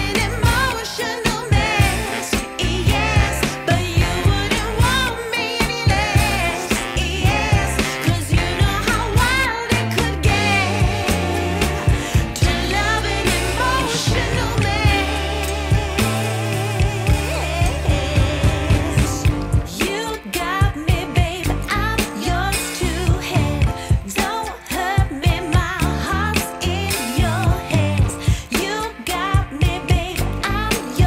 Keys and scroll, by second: 1.3 w, 2.0 z, 2.6 F3, 7.4 ctrl+a, 11.0 F3, 17.3 w.